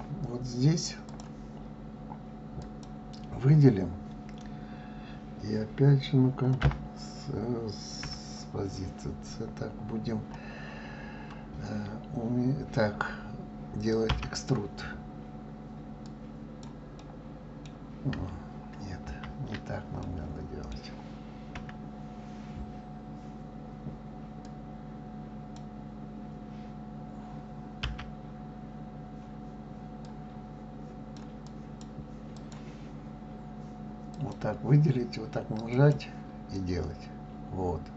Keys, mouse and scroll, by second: 1.1 click, 2.6 click, 6.6 KP_7, 8.0 KP_3, 14.1 e, 16.9-19.1 middle drag, 19.1 ctrl+z, 20.0-21.5 middle drag, 21.5 KP_3, 24.4 click, 27.9 e, 31.4 click, 32.4 click, 34.1 click, 35.7 click, 36.5 click.